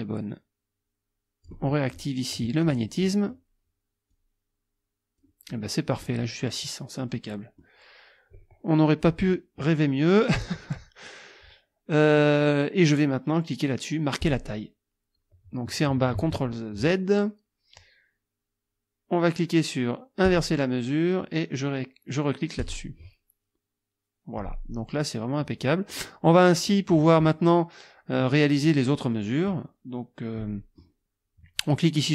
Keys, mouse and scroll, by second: 2.6 click, 3.1 click, 4.1-5.4 drag, 5.5 middle click, 7.0 middle click, 14.2 click, 16.1 ctrl+z, 20.3 click, 22.6 click, 25.1-26.1 drag, 26.3 click, 28.3-29.3 drag, 30.4 click.